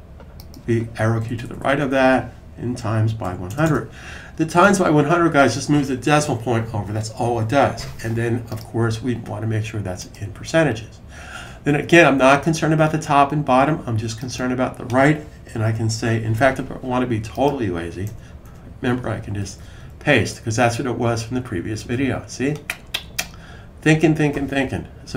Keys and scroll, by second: 1.1 Right, 1.2 Right, 1.4 Right, 1.5 Right, 2.3-4.0 typing, 19.1 super+v.